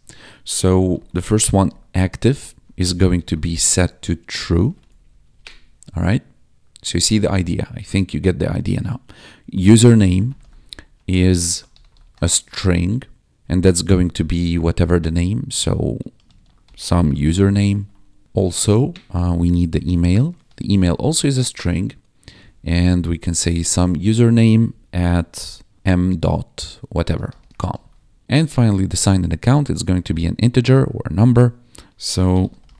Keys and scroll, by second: 0.4-4.2 typing, 4.2 Return, 4.6 ctrl+s, 4.8 ctrl+Down, 9.3-14.1 typing, 15.8-17.9 typing, 18.2 Escape, 18.8 ctrl+shift+Right, 19.3-20.6 typing, 20.9 ctrl+Right, 22.3 Right, 23.6 ctrl+Right, 24.7 shift+2, 25.7 ., 26.8-27.8 typing, 28.1 Right, 32.0-32.7 typing.